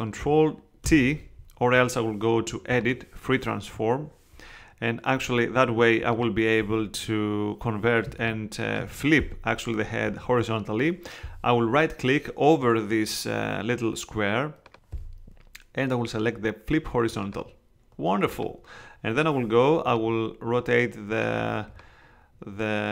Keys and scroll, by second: 0.8 super+t, 1.7 super+Escape, 8.0 space.